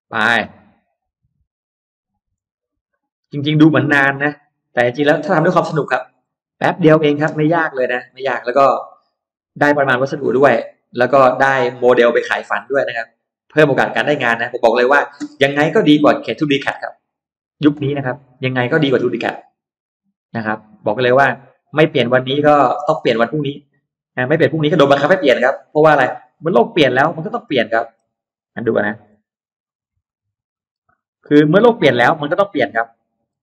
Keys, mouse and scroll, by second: 0.2-0.5 scroll down 1, 0.7 scroll up 1, 1.2 click, 3.3 click, 4.0 click, 4.9 click, 5.5 click, 5.8-6.4 scroll down 1, 6.4-6.8 scroll up 1, 7.2-7.9 scroll up 2, 7.9 click, 8.7 click, 9.5 click, 10.2 click, 11.2 click, 12.4 click, 13.8 click, 14.5 click, 15.0-15.9 scroll down 1, 15.6 middle click, 16.1-16.4 scroll down 1, 16.7 scroll up 1, 17.6 scroll down 1, 17.9 middle click, 18.2-18.5 scroll down 1, 18.8-19.3 scroll up 1, 19.1 middle click, 19.3 scroll down 1, 20.6 click, 21.5 click, 22.1 click, 22.5 middle click, 22.9 middle click, 23.4 middle click, 24.0 click, 25.0 click, 25.8 click, 26.6 click, 26.9 middle click, 28.1 scroll up 1, 28.7 ctrl+z, 29.0-29.3 scroll up 1, 29.5 scroll down 1, 30.0 ctrl+z, 30.4 middle click, 30.4 scroll up 1, 30.6 scroll down 1, 30.7-31.0 scroll up 1, 31.2 click, 31.9 click, 32.7 middle click.